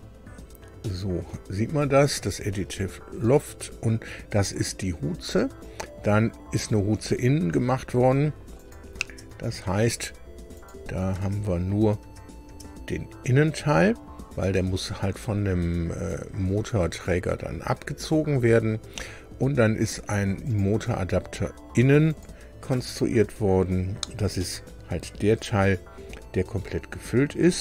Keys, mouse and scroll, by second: 0.8 click, 8.6 click, 9.0 space, 10.5 click, 11.1 space, 12.4 space, 17.1 scroll down 2, 18.6 scroll down 2, 20.4 click, 22.0 click, 22.7 space, 23.9 scroll down 2, 24.3-27.6 middle drag.